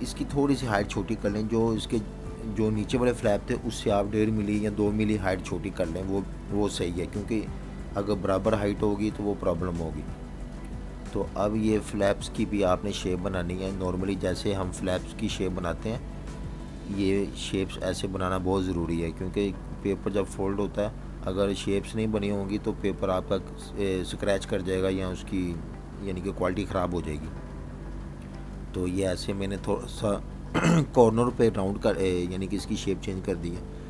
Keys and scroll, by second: 4.7-8.7 typing, 16.4 typing, 24.8-25.6 typing, 25.8 super+-, 26.8-27.8 typing, 28.9 super+-, 29.4 space.